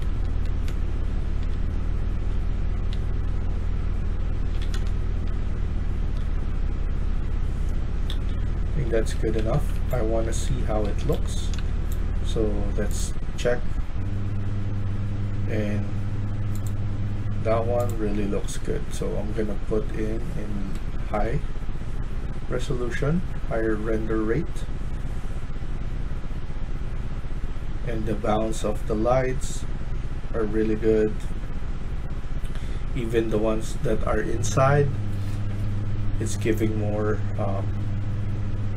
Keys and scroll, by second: 0.0-2.8 typing, 4.1-5.1 typing, 6.4-6.9 typing, 8.0-11.9 typing.